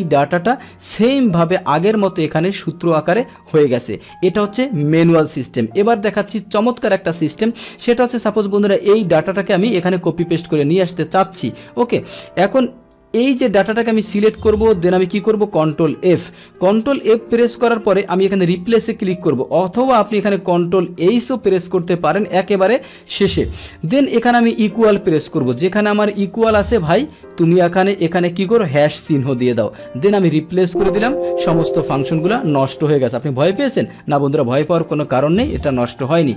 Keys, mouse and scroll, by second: 1.0 click, 5.4 ctrl+z, 6.2 ctrl+z, 7.4 ctrl+z, 8.5-9.8 drag, 12.0 click, 13.1 Delete, 13.7 click, 13.8 Delete, 16.1 ctrl+f, 17.3 click, 18.2 click, 19.6 click, 21.0 ctrl+h, 22.2 click, 23.2 click, 27.1 click, 30.3 click, 32.4 click, 35.6-36.3 drag.